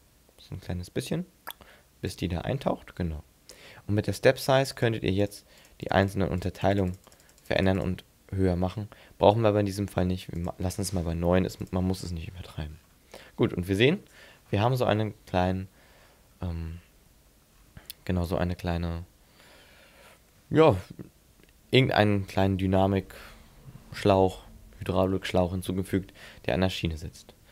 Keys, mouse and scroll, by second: 4.7 click, 5.2 click, 5.6 click, 5.8 click, 6.1 click, 6.4 click, 6.6 click, 6.7 click, 6.9 click, 7.1 click, 7.3 click, 7.4 click, 7.6 click, 7.8 click, 10.4 click, 12.3 scroll up 3, 12.7-13.3 scroll down 5, 13.3 middle click, 14.2-15.4 scroll down 11, 16.0-17.9 scroll up 15, 26.7-27.1 scroll down 4, 27.1 scroll up 4.